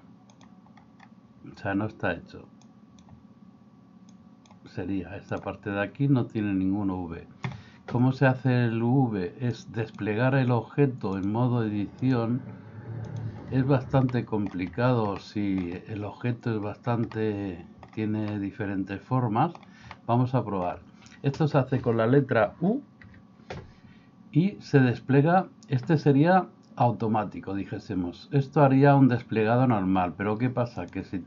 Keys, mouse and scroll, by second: 0.4 click, 2.7 click, 4.2 click, 9.6 click, 11.2 click, 12.0-13.2 drag, 14.1 shift+middle click, 15.3 middle click, 17.2 middle click, 18.3-19.6 middle drag, 20.0 middle click, 23.0 u.